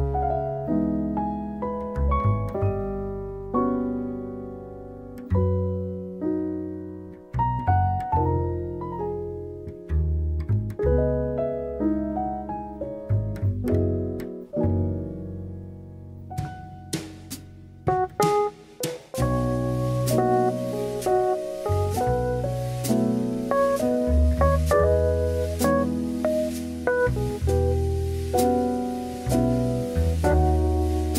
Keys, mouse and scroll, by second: 0.9-2.2 drag, 5.2-6.4 drag, 8.4 click, 9.3 click, 9.5 click, 9.7 click, 10.5-14.2 drag, 16.0 shift+middle click, 17.6 Tab, 18.1 alt+z, 19.7 middle click, 21.3 s, 24.5 KP_1, 26.1 middle click, 26.6 middle click, 27.5 middle click, 28.1 middle click, 29.7 click, 30.0-31.1 middle drag.